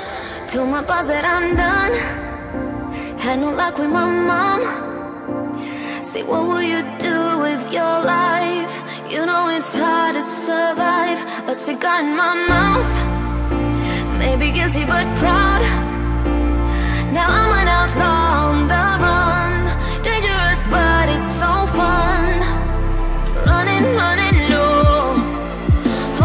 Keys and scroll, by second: 4.0 Delete, 13.2 Delete.